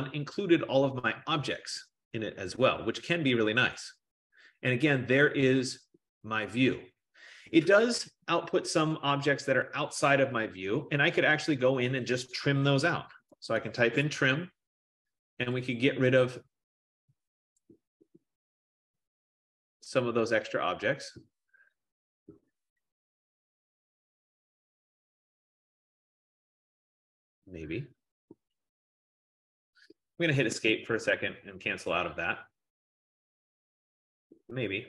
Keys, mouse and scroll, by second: 2.8-3.9 scroll, 4.2 middle click, 7.6 middle click, 11.4-12.6 middle drag, 13.0-14.2 typing, 15.5 F15, 15.9-17.4 drag, 17.4 typing, 30.6 Escape, 31.4 Escape.